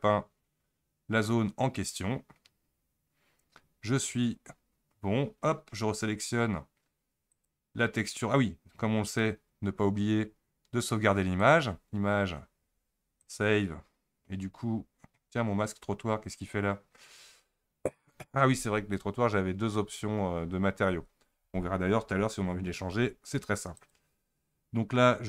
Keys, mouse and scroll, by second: 0.8-1.4 scroll up 3, 1.4-2.1 scroll down 1, 2.1-5.1 scroll down 1, 7.3 click, 9.1 click, 11.4-14.5 drag.